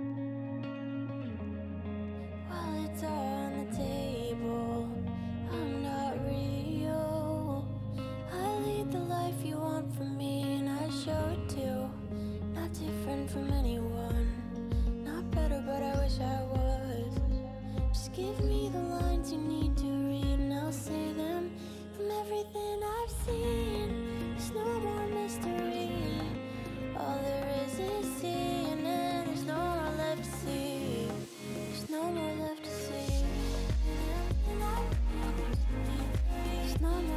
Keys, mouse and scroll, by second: 1.2 click, 4.0 ctrl+v, 4.6 click, 6.6 click, 7.0-8.4 middle drag, 8.4 click, 14.0 click, 14.2-19.0 middle drag, 19.0-19.4 scroll down 4, 19.8-20.9 shift+middle drag, 20.9 scroll up 3, 21.5-22.5 shift+middle drag, 22.5 click, 22.8-23.9 middle drag, 23.9 click, 25.8 shift+click, 26.6 shift+click, 26.8-28.2 middle drag, 28.2 shift+click, 28.6 shift+click, 29.1 shift+click, 29.6 shift+click, 30.3 shift+click, 32.3 ctrl+p, 32.9 click, 33.7 shift+middle click, 34.4 click, 35.3 scroll down 3, 35.8-37.1 middle drag.